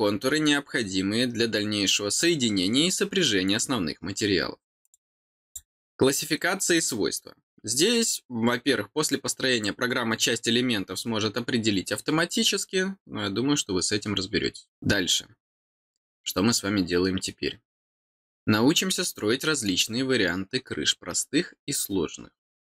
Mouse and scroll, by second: 4.8 click, 5.4 click, 7.4 scroll down 1, 7.9-9.7 scroll down 1, 9.7-11.0 scroll down 1, 11.0-13.8 scroll down 1.